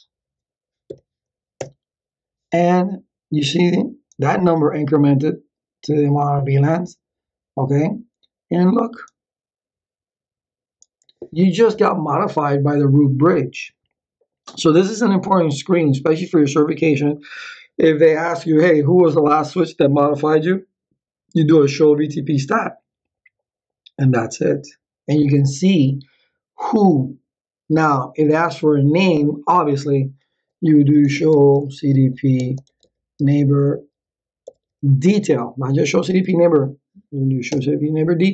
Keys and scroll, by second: 0.9 Up, 1.6 Return, 30.7-35.1 typing, 37.5 Return.